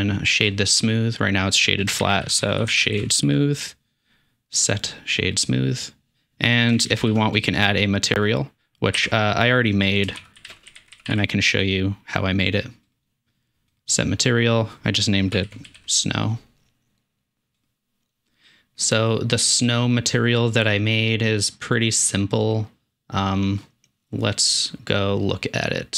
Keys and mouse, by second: 0.0 middle click, 0.5 shift+middle drag, 1.6 click, 2.0 shift+a, 4.9 s, 6.6 click, 6.9 shift+a, 14.4-19.3 drag, 21.0-22.7 middle drag, 23.2 middle click.